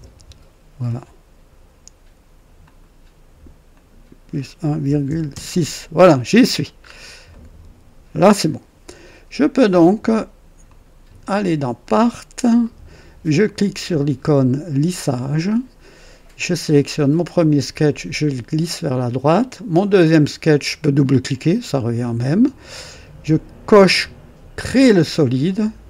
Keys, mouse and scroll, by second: 2.5 click, 2.8 typing, 3.7 click, 4.8-5.2 typing, 5.2 KP_Enter, 6.3 typing, 6.7 scroll up 1, 7.2 right click, 10.4-11.1 typing, 10.6 click, 11.8 click, 14.9 click, 16.6 click, 16.7-17.4 typing, 18.7 click, 20.0 click, 20.5 typing, 21.0 click, 24.5 click.